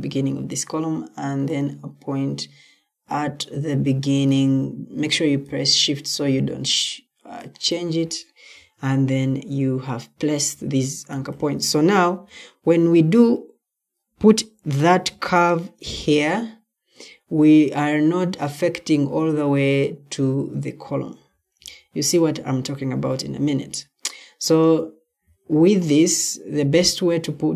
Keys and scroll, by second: 8.9 Escape, 23.3 Escape, 25.1 Escape.